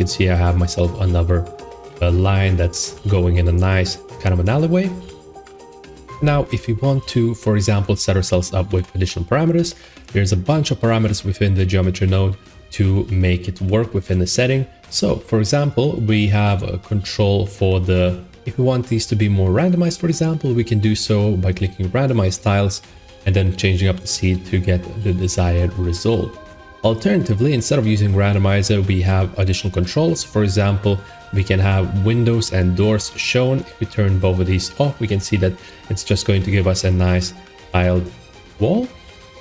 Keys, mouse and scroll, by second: 0.9 shift+middle click, 1.0 middle click, 1.6 middle click, 2.3 middle click, 2.8 middle click, 3.2 shift+middle click, 4.1 middle click, 4.2 middle click, 4.7 middle click, 8.6 Tab, 9.0 click, 10.4 click, 13.5 middle click, 14.2 middle click, 14.3 middle click, 14.8 middle click, 18.0 click, 21.5 click, 24.2 click, 24.8 middle click, 25.2 middle click, 25.3 middle click, 26.0 middle click, 27.7 click, 28.1 middle click, 28.7 middle click, 29.3 middle click, 33.6 click, 34.3 click, 34.9 middle click, 35.3 middle click, 35.5 click, 36.3 middle click, 36.4 middle click, 36.6 middle click, 37.0 middle click, 38.1 middle click.